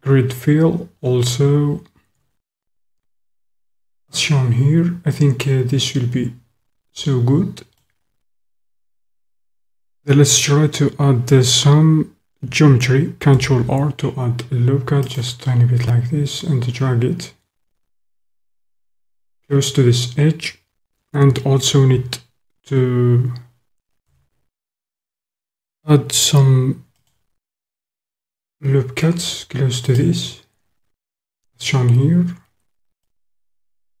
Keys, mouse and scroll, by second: 3.6-7.9 middle drag, 13.3 ctrl+r, 18.9 click, 24.0 ctrl+r, 30.0 click, 33.0 click, 33.1-34.0 middle drag.